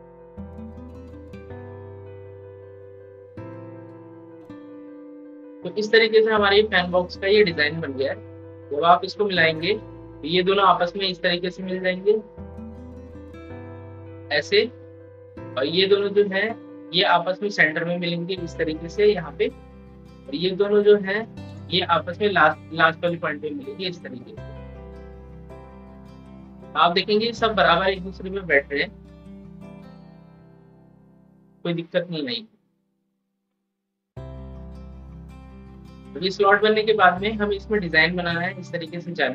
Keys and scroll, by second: 29.5 ctrl+z, 29.9 ctrl+z, 35.6 ctrl+z.